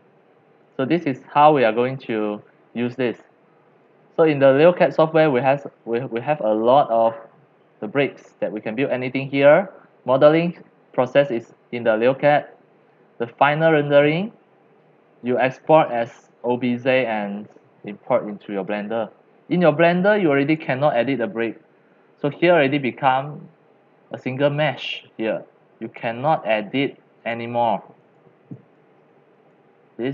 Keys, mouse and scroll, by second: 0.0 middle click, 0.1 middle click, 0.7 click, 2.0 click, 3.9-5.9 drag, 8.4 click, 9.2-12.1 drag, 12.7 click, 17.0 click, 18.6 click, 19.3 middle click, 19.5 middle click, 19.5 scroll, 19.8 middle click, 20.5 click, 21.2 click, 21.8 middle click, 21.9 middle click, 25.8 click, 27.2 click, 28.0 click, 28.7 click, 29.3 click.